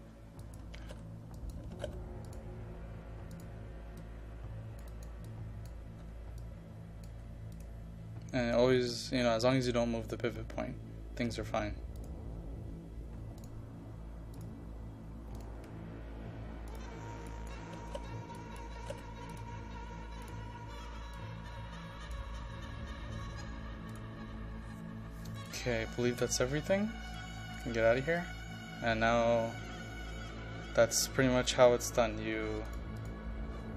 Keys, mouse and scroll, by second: 0.7-1.9 typing, 1.4 click, 2.3 click, 6.1 KP_5, 6.5 click, 7.2 KP_5, 7.6 click, 17.6-19.0 typing, 18.4 click, 19.4-23.0 drag, 23.4 KP_5, 24.0-32.2 drag.